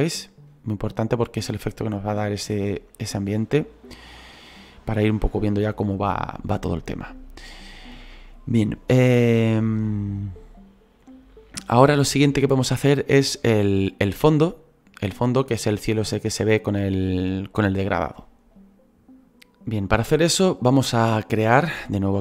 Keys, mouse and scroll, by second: 19.3-22.2 drag.